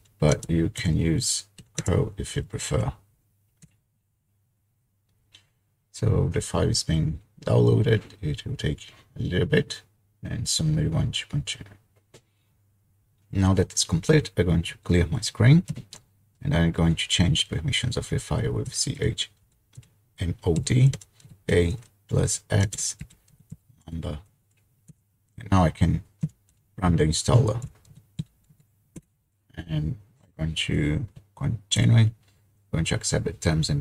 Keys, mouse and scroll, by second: 0.0-0.4 typing, 1.6 typing, 2.6 ctrl+v, 3.1-3.8 typing, 3.9 Return, 15.9 ctrl+l, 18.4-24.4 typing, 24.9 Return, 26.0-28.7 typing, 29.0 Return, 31.8 Return.